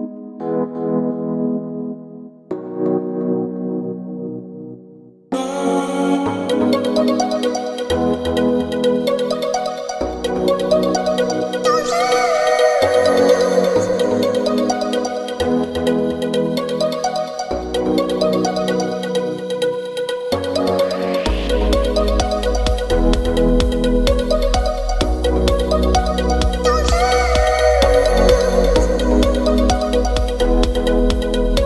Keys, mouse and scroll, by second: 11.0 click, 15.2-17.9 drag, 18.1 click, 21.3 click, 23.7 middle click, 26.3 click, 28.8-31.6 middle drag.